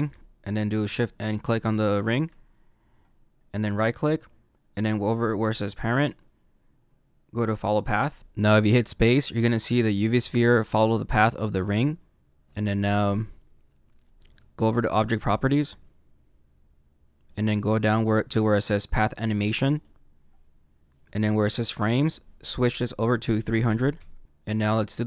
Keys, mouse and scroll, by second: 1.3 shift+click, 3.6 right click, 8.2 space, 12.2 click, 13.3-14.0 scroll down 2, 15.3 click, 16.1-17.4 scroll down 5, 19.6 click, 20.5-21.9 scroll down 1, 21.9 click, 23.6 KP_0, 24.2 click, 24.5 middle click.